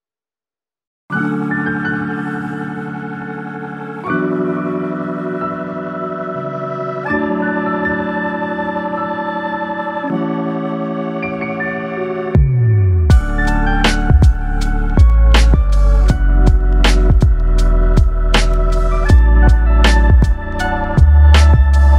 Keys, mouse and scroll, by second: 0.9 click, 3.6-4.0 scroll down 1, 4.0 middle click, 5.5 click, 8.8 click, 11.9 middle click, 13.6 click, 16.7 click, 19.2 click.